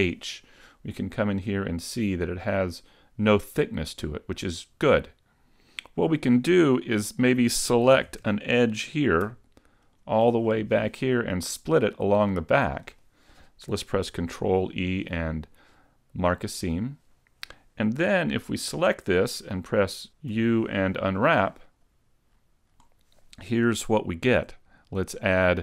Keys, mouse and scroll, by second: 1.0 middle click, 8.0 ctrl+Tab, 9.9 alt+right click, 10.5 middle click, 14.2 ctrl+e, 16.8 middle click, 18.2 a, 18.5 a, 20.4 u.